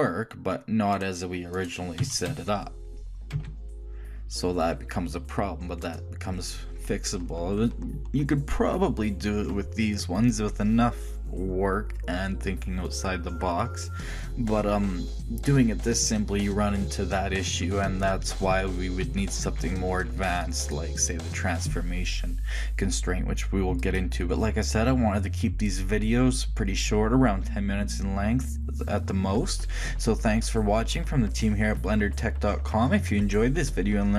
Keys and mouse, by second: 1.7-3.5 right drag, 2.2 r, 18.8 ctrl+z, 19.3 ctrl+z, 19.7 ctrl+z, 24.0-30.7 middle drag.